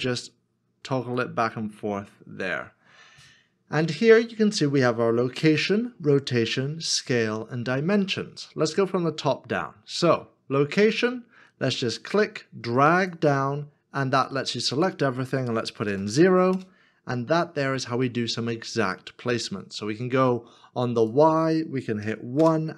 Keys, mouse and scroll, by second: 0.5 n, 15.9 0, 16.5 Return, 22.0 Return, 22.4 KP_1.